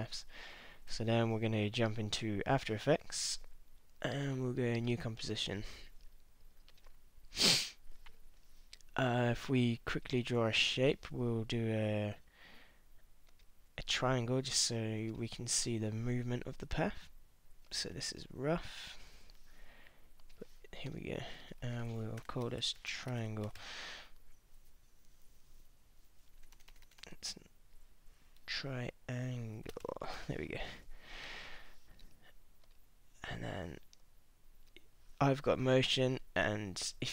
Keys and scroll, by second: 22.2 Return, 22.3-24.1 typing, 26.4 BackSpace, 28.2-30.3 typing.